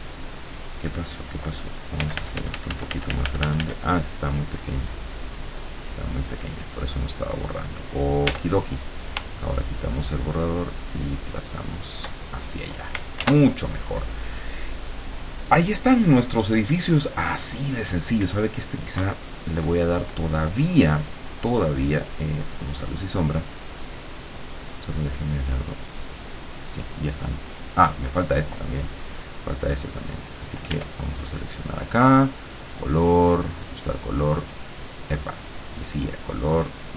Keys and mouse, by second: 2.0 f, 4.0-7.6 drag, 8.3 e, 9.7-12.1 shift+drag, 13.3 ctrl+s, 22.5 click, 24.8 click, 26.0 click, 30.8 r, 32.6-34.7 drag, 35.6 click, 36.8 click.